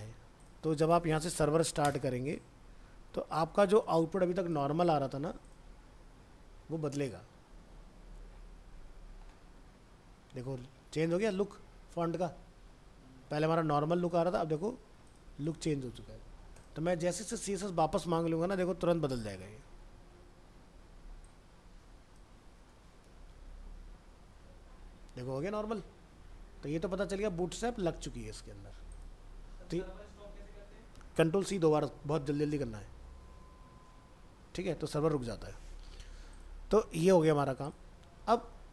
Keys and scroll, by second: 17.2 alt+Tab, 23.7 ctrl+s, 24.5 alt+Tab, 26.9 ctrl+z, 27.2 ctrl+s, 27.9 alt+Tab.